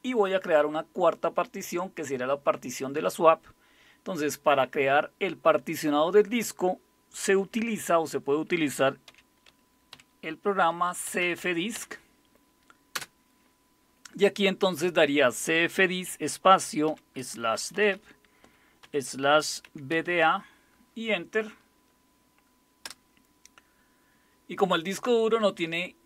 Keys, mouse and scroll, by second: 9.1-12.9 typing, 16.9-20.6 typing, 22.8 Return.